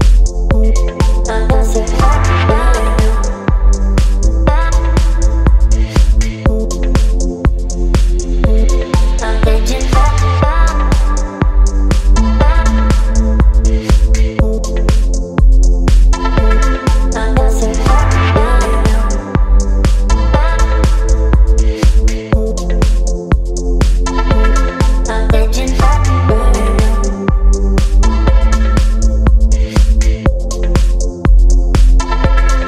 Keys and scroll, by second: 0.3 space, 2.7 Return, 2.8 Delete, 3.3 space, 3.8 ctrl+d, 4.0 v, 4.8 space, 5.6 space, 8.2 Delete, 8.7 space, 9.1 p, 14.5 Return, 14.6 Delete, 18.1 Return, 18.3 Delete, 18.9 space, 19.4 ctrl+v, 20.0 space, 21.8 space, 23.3 ctrl+g, 29.8 ctrl+t.